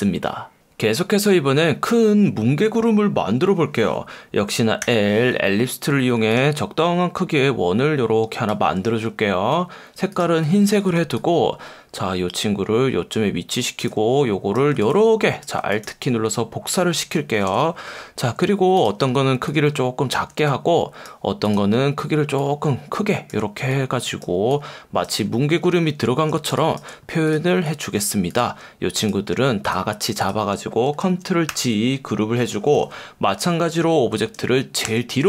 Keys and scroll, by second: 4.8 l, 10.6 v, 17.3 super+=, 26.4 space, 26.9 space, 31.5 super+g, 34.9 shift+super+[.